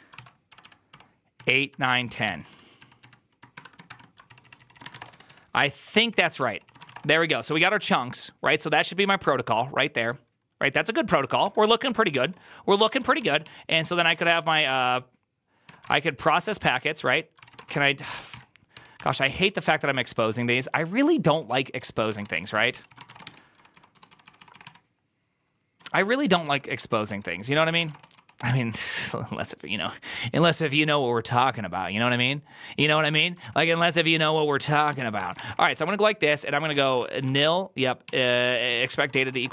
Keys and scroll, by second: 0.0-7.2 typing, 4.1 ctrl+c, 4.3 ctrl+c, 8.4 alt+{, 9.1 o, 11.3 alt++, 12.1 alt+{, 12.8-24.5 typing, 15.5 Tab, 18.2 ctrl+n, 18.6 ctrl+t, 18.6 ctrl+h, 20.2 ctrl+u, 25.7 Tab, 25.7-28.8 typing, 27.0 ctrl+n, 27.4 ctrl+c, 33.6 ctrl+c, 33.6 shift+o, 33.9 Return, 34.8 Tab, 35.0-35.9 typing, 36.6 Tab, 36.8 ctrl+c, 37.1-39.5 typing, 37.3 Return, 38.6 Tab, 38.8 ctrl+c.